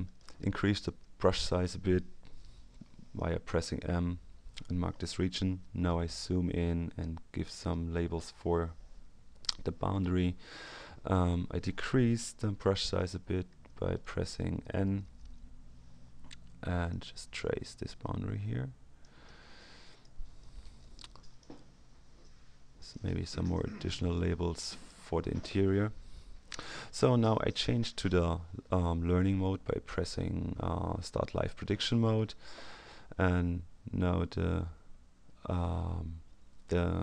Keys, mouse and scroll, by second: 0.0 middle click, 0.4 m, 3.1-4.3 drag, 6.0-7.1 ctrl+scroll up 2, 7.1-7.9 ctrl+scroll up 2, 10.5 click, 12.8 n, 14.0 middle click, 14.1 click, 14.3 middle click, 14.3 n, 16.9-19.5 drag, 20.3 click, 22.7 click, 23.9-25.3 drag, 31.6 click, 33.9-34.4 scroll up 1, 34.8-35.3 scroll down 1.